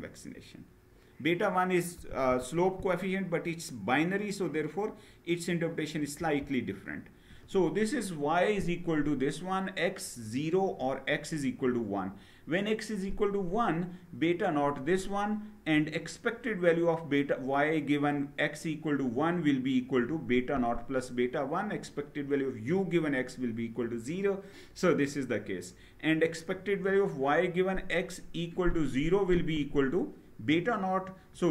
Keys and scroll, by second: 5.9 Down.